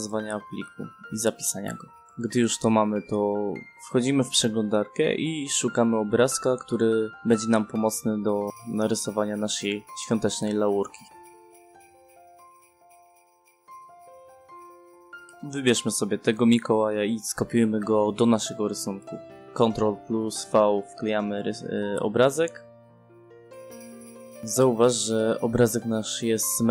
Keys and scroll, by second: 0.0-0.3 typing, 8.3-10.0 typing, 10.5 ctrl+alt+l, 10.8 Down, 11.0 Return, 20.9 ctrl+v, 21.4 0, 21.6 0, 21.7 space.